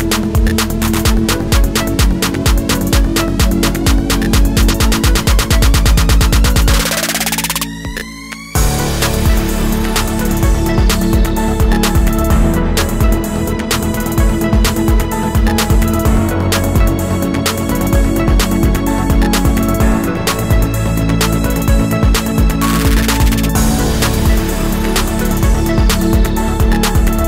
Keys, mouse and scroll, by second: 4.6 space, 23.9 Caps_Lock, 24.5 space, 25.7 alt+scroll up 1, 26.6-27.2 alt+scroll up 1.